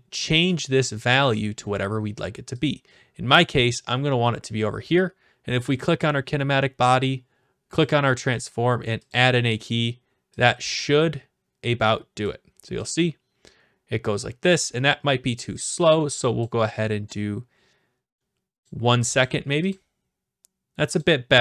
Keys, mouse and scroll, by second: 0.8-2.0 drag, 3.7-4.8 drag, 5.8-6.8 drag, 7.8 click, 9.1 click, 12.2 click, 12.9 click, 14.7 click, 16.4 click, 18.6 click, 19.2 click, 19.7 click, 21.0 click.